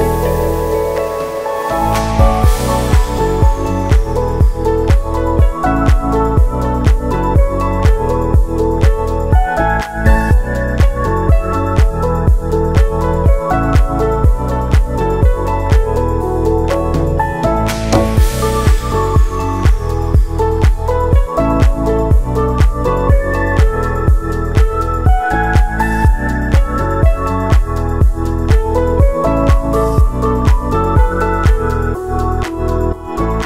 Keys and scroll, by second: 0.2-2.2 typing, 7.5 1, 8.5 0, 9.0 7, 10.4-11.3 typing, 13.4-14.9 typing, 15.1 Return, 18.6 ctrl+c, 19.5 ctrl+v, 21.2 space, 26.5 n, 28.6 F9, 29.7 space.